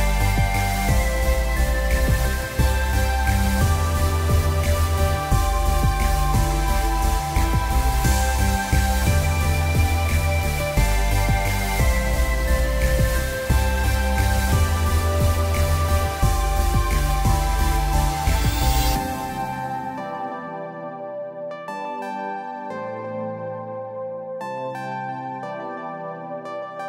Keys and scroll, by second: 3.3 3, 3.5 Return, 7.7 r, 13.1 p, 13.9 p, 15.1 l, 25.7 p.